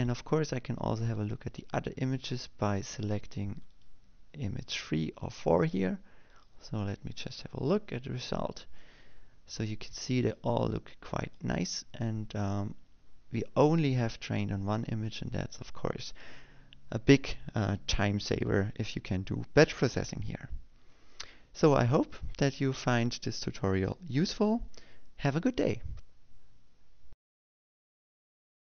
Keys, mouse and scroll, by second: 1.7 click, 5.0 click, 8.0 click, 12.0 click, 12.9 click.